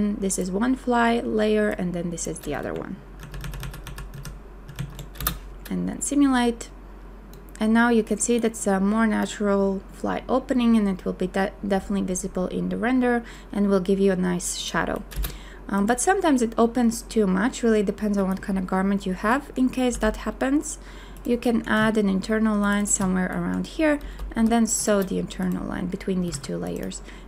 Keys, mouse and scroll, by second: 3.2 ctrl+z, 5.2 space, 15.1 click, 15.1 space, 19.9 g, 22.6 shift+click, 24.3 n, 26.3 a.